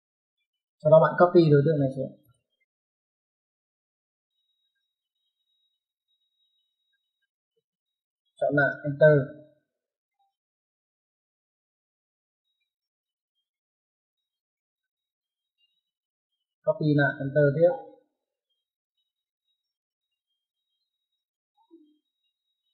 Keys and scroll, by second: 2.2-2.9 typing, 7.4-8.4 typing, 15.6 space, 16.8 space.